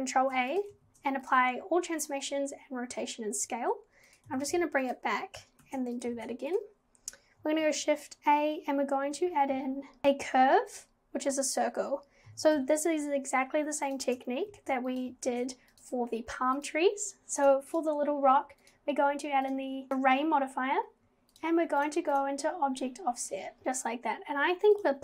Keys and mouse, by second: 0.2 ctrl+a, 0.9 ctrl+a, 4.1 click, 4.3 g, 5.6 ctrl+a, 6.2 ctrl+a, 7.6 shift+a, 12.3 g, 14.5 ctrl+a, 15.3 ctrl+a, 16.8-17.4 drag, 17.7 click, 20.0 click, 21.3 click, 21.8 click, 22.1 click, 24.8-25.0 drag.